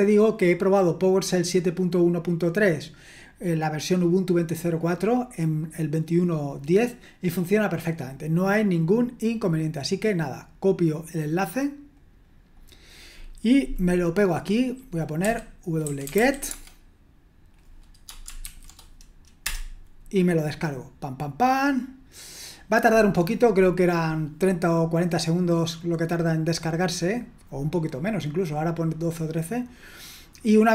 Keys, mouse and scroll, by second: 9.7-10.8 right drag, 11.9 click, 12.6 click, 15.6-16.6 typing, 18.4 ctrl+v, 19.4 Return.